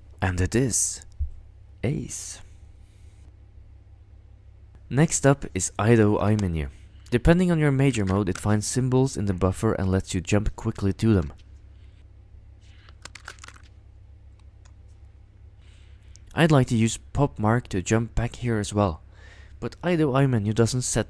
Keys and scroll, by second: 7.9 ctrl+x, 8.1 ctrl+|, 10.5-11.2 typing, 13.1 ctrl+x, 13.1-14.0 typing, 14.2 Tab, 14.6 Return.